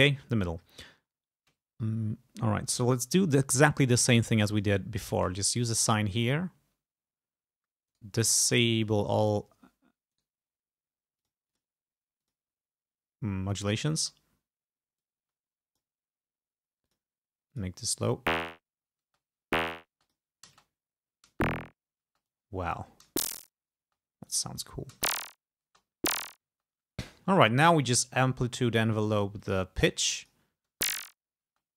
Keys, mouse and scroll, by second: 2.9 click, 4.0 click, 4.6 click, 5.5 click, 8.0 right click, 8.9 click, 10.2 right click, 11.3 click, 11.6 click, 12.3 click, 13.6 click, 14.1 space, 15.1 click, 17.0 click, 17.6 click, 18.3 space, 19.2 space, 20.1 click, 21.4 space, 22.1 space, 22.4 click, 23.1 space, 24.0 space, 24.4 click, 25.0 space, 25.7 space, 27.9 click, 29.5-30.8 drag, 30.8 space, 31.6 space.